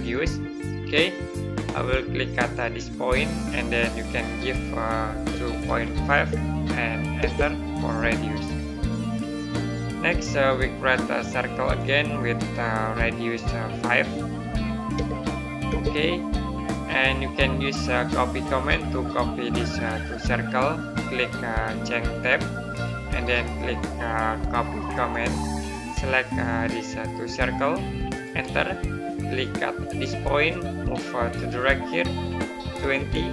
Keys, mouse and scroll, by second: 0.0 click, 2.6 click, 5.1 KP_2, 8.6 scroll up 1, 10.2 middle click, 11.5 click, 14.8 KP_5, 16.9-17.6 scroll down 1, 17.6 middle click, 22.0 click, 24.8 click, 28.1 right click, 29.8 click, 32.6 KP_2, 33.0 KP_0.